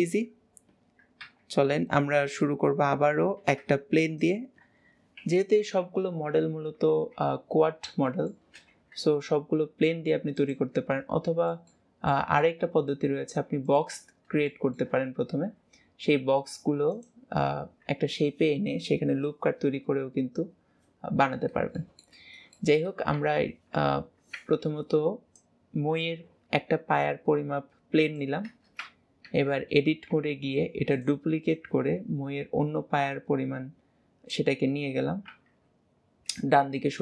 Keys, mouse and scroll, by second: 2.4-3.4 middle drag, 3.4 shift+a, 5.2 KP_7, 6.4 KP_Decimal, 8.1 middle click, 11.6-12.6 middle drag, 14.5 middle click, 21.8 middle click, 22.6 middle click, 25.4 click, 31.6 click.